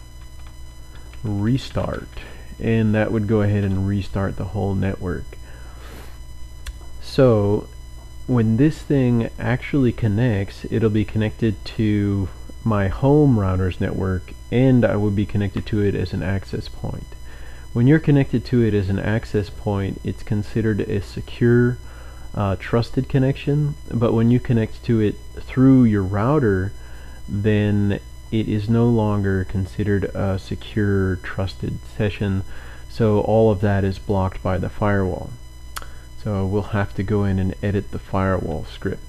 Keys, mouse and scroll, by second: 0.0-3.5 typing, 0.4 Tab, 3.6 Return, 5.7-6.6 typing.